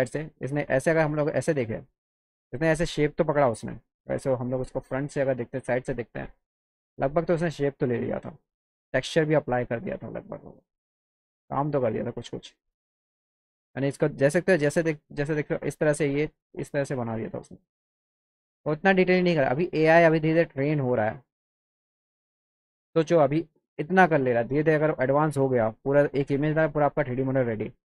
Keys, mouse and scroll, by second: 7.1-8.8 drag, 10.6 scroll down 1, 10.9 click, 12.4 click, 15.8-17.9 drag, 18.9 click, 20.0 click, 21.0 click, 21.9 click, 23.0 click, 23.3 click, 23.8 click, 25.1 click, 26.8 click.